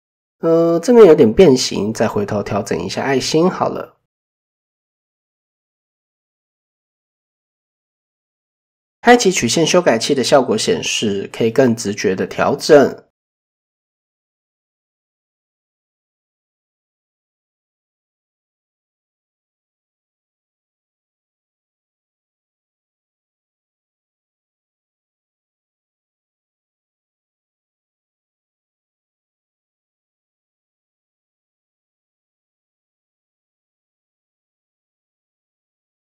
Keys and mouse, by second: 5.5 click, 6.7 Tab, 7.5 shift+middle click, 8.5 click, 9.0 middle click, 10.0 click, 10.4 middle click, 11.1 shift+middle click, 11.4 middle click, 11.9 middle click, 13.4 middle drag, 14.9-15.2 middle drag, 17.2 middle click, 18.1-20.1 drag, 21.5 click, 22.6 click, 23.9 middle click, 25.8 KP_7, 28.0 click, 28.3-31.9 drag, 34.9 middle click, 35.7 shift+middle click, 35.9 middle click.